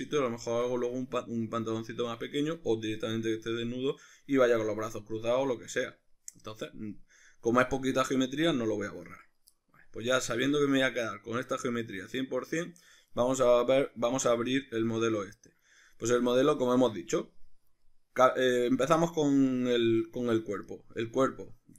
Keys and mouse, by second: 0.0-9.2 ctrl+middle drag, 9.2 right click, 9.5-14.6 middle drag, 14.6 Tab, 15.1 ctrl+middle click, 17.9 middle click, 19.6-21.7 middle drag.